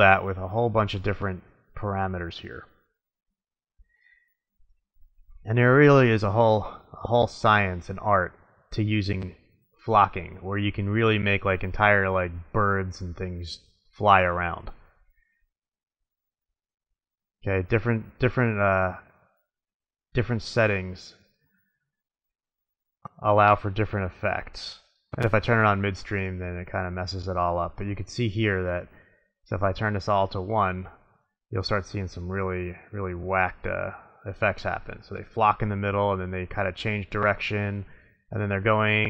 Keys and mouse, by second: 0.1-1.6 drag, 1.9-2.7 middle drag, 4.7 middle click, 7.1-9.1 middle drag, 10.4 middle drag, 10.8-12.4 middle drag, 13.9-15.2 middle drag, 15.7 middle click, 15.9-17.2 drag, 17.7-18.9 middle drag, 20.9-21.2 middle drag, 21.4-23.1 drag, 23.1 middle click, 26.2-26.7 middle drag, 26.7-28.1 drag, 31.4 click, 32.9-34.9 drag.